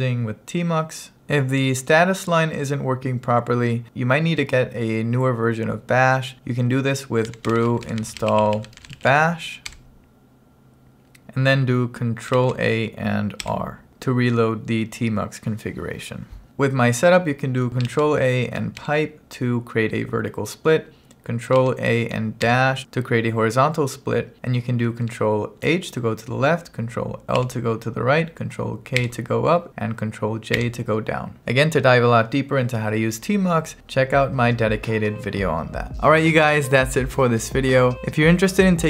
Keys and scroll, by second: 7.1-9.6 typing, 9.8 Return, 12.4 ctrl+a, 13.4 r, 17.9 ctrl+a, 18.9 shift+\, 21.6 ctrl+a, 22.5 -, 25.7 ctrl+h, 27.4 ctrl+l, 29.0 ctrl+k, 30.6 ctrl+j.